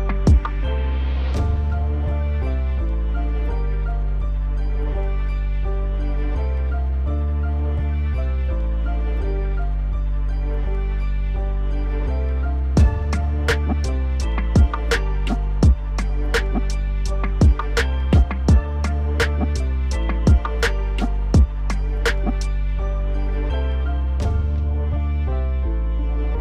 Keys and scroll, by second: 15.4 ctrl+z, 23.5 ctrl+BackSpace.